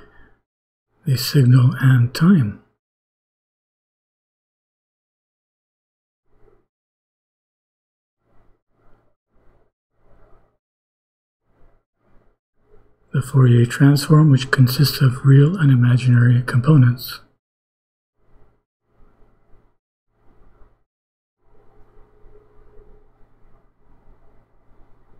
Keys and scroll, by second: 2.5 BackSpace, 9.4 ;, 15.7 BackSpace, 22.3 ;.